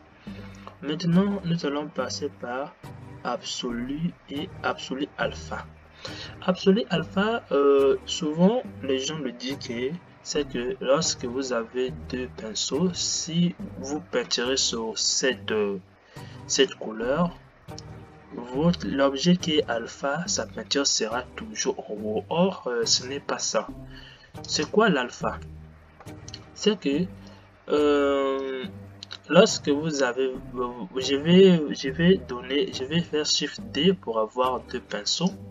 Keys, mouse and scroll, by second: 24.7 click, 27.4-32.8 drag, 32.8 shift+d.